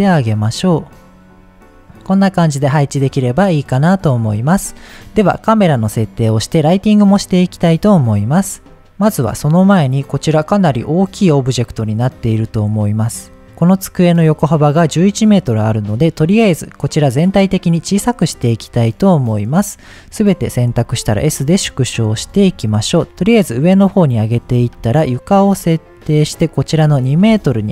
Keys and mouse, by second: 2.4 middle click, 4.2-9.7 drag, 9.7 middle drag, 11.3 click, 15.8 middle click, 17.7-18.2 middle drag, 19.0-19.7 drag, 20.0-20.3 middle drag, 20.7 s, 21.8 click, 22.2 g, 22.3 z, 22.7 click, 23.0 shift+a, 23.6 middle click, 24.6 shift+a, 27.0 shift+click, 27.5-27.7 drag.